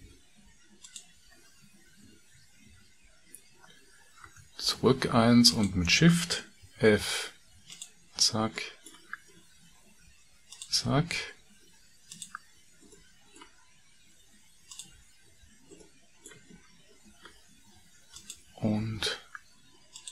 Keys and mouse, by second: 0.8 ctrl+click, 4.3 ctrl+z, 5.4 click, 6.6 f, 8.6 middle click, 10.0 shift+f, 10.9 f, 12.0 click, 12.9 middle click, 14.6 shift+click, 15.3 f, 15.8 middle click, 18.0 click, 20.0 shift+click.